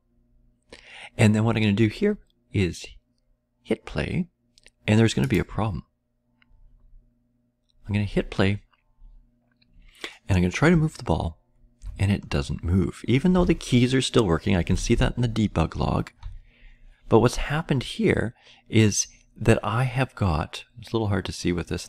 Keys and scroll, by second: 11.2-11.8 Left, 11.8-13.3 Right, 13.9-14.6 Up, 15.4-16.2 Down.